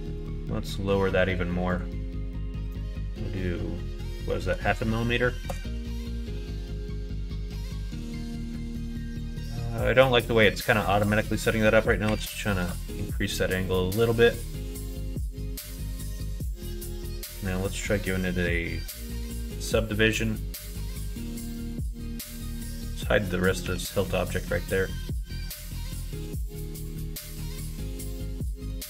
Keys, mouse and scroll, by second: 0.2-6.2 drag, 6.6 middle click, 7.2 middle click, 8.0 middle click, 9.3 middle click, 11.0-13.2 drag, 14.2 middle click, 15.6 middle click, 17.5-19.2 drag, 19.6-21.7 middle drag, 22.4 click, 23.6 h, 23.9-28.7 middle drag.